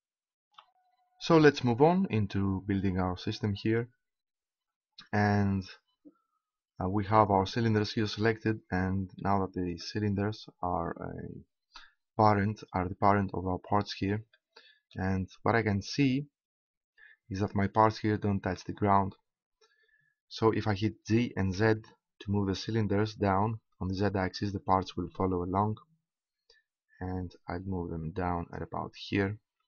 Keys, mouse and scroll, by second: 9.2-12.3 middle drag, 14.3-15.7 middle drag, 16.9 middle click, 21.0 g, 28.5-29.6 drag.